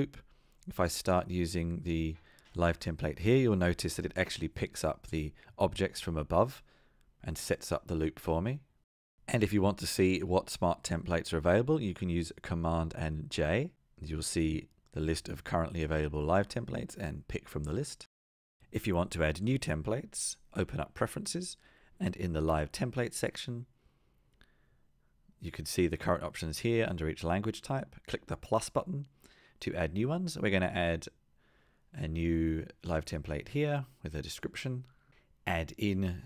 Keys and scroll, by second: 1.1 Return, 10.8 super+j, 13.9 Return, 14.6 super+z, 15.3 super+j, 17.4 Return.